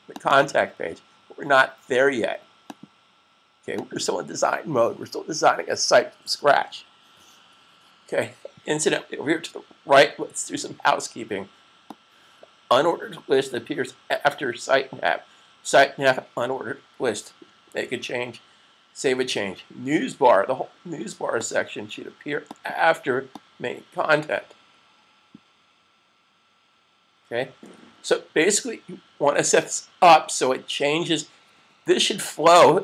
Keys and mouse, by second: 0.0 click, 0.1 double click, 11.8 click, 17.5 super+s, 21.2 click, 23.0 click.